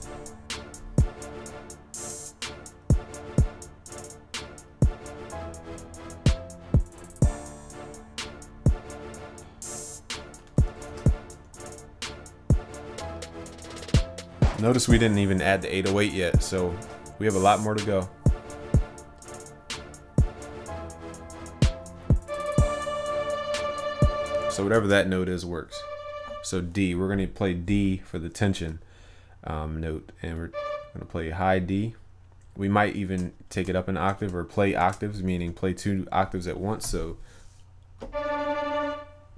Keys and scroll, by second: 10.8 ctrl+s, 34.6 ctrl+c, 34.8 ctrl+v, 35.4 ctrl+Up.